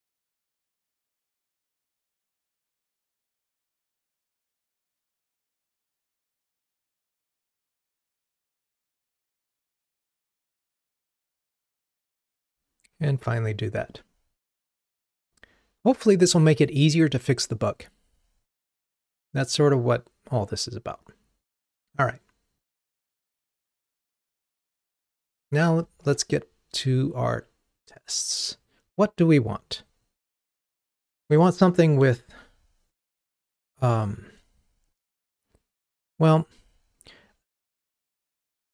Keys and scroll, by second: 9.8 BackSpace, 11.4 super+BackSpace, 12.4 ctrl+r, 26.2 ctrl+Tab.